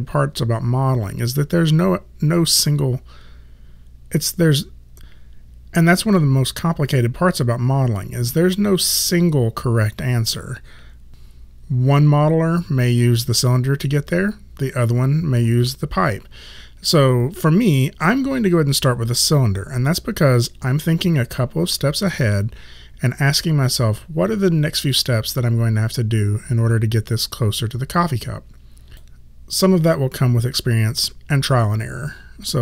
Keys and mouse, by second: 28.9 click, 32.5 click.